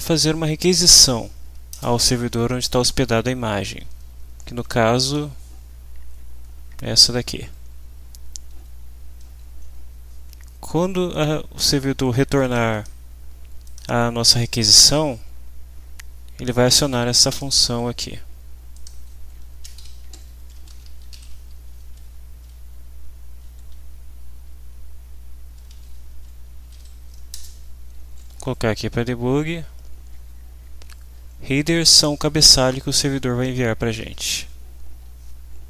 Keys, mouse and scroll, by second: 1.7 Return, 3.8 shift+', 5.0 ctrl+v, 6.0 Left, 7.4 Home, 8.4 Up, 9.2 Up, 12.4 click, 13.6 click, 17.3 click, 18.7 click, 19.8 shift+Home, 20.3-22.0 typing, 25.3-26.2 typing, 27.3 Return, 28.5 Home, 29.2 Right, 29.5 End, 30.1 Left, 31.1 Right, 31.5 shift+Left, 33.6 shift+Right, 34.0 End.